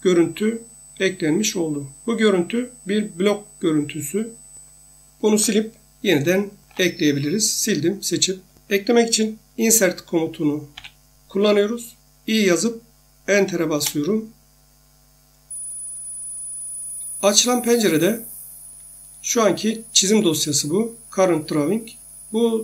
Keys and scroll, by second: 6.7 Delete, 10.7 i, 13.7 Return.